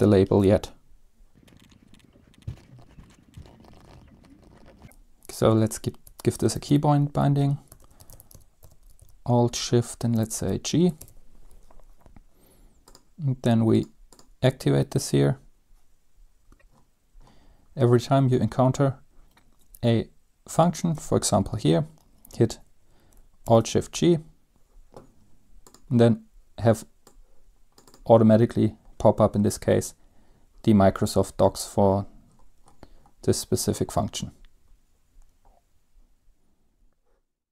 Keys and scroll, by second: 2.3-9.2 typing, 5.6 Return, 10.3 typing, 11.1 ctrl+s, 23.6 alt+g.